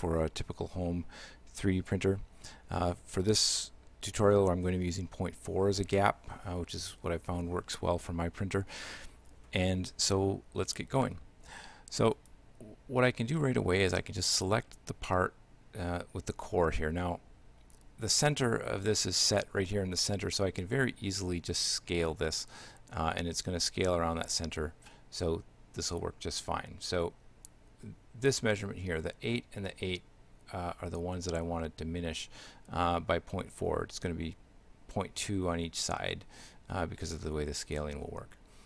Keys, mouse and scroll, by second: 12.2 right click, 13.4 shift+middle click, 14.8 right click, 19.8 shift+middle click.